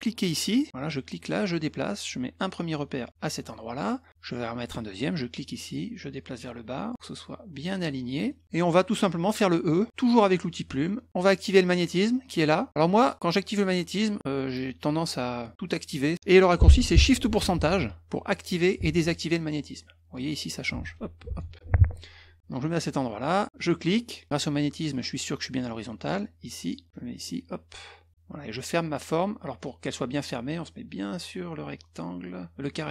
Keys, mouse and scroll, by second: 0.7-3.3 drag, 5.2-7.8 drag, 8.3 middle click, 9.7 middle click, 10.8 middle click, 13.0 click, 17.6 shift+ù, 18.9 shift+ù, 20.8 shift+ù, 21.3 shift+ù, 23.6 click, 26.1 click, 27.2 click.